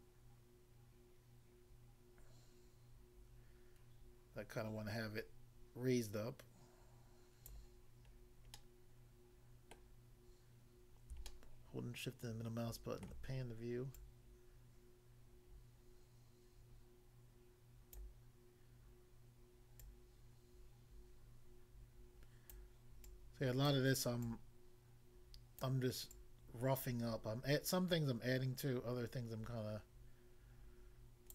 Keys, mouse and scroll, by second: 7.5 click, 8.2 scroll down 1, 8.5 middle click, 9.8 middle click, 10.2-11.0 scroll up 1, 11.3 shift+middle click, 14.0 click, 18.0 click, 19.8 click, 22.6 click, 23.0 click, 23.7 click, 24.2 click, 25.7 click, 26.1 click.